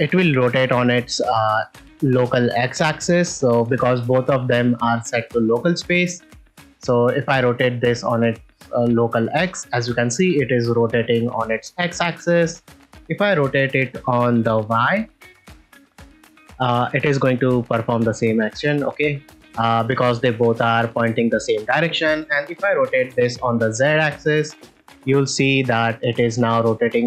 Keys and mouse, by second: 2.3 click, 7.6 r, 7.7 x, 15.0 r, 15.2 y, 23.1 r, 23.2 z.